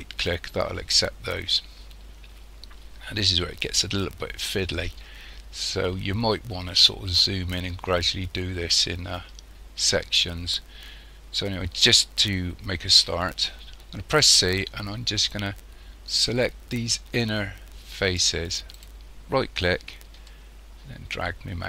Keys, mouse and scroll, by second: 1.0 scroll down 1, 3.8 shift+middle click, 5.9-6.4 scroll up 1, 6.4-6.9 scroll up 2, 7.5 shift+middle click, 12.9 c, 20.3 shift+middle click.